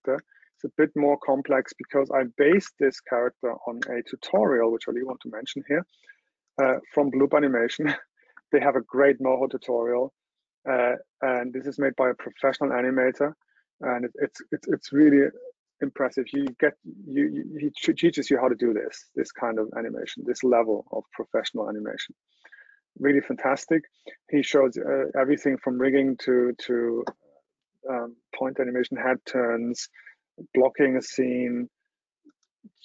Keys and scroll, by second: 2.3 super+Tab.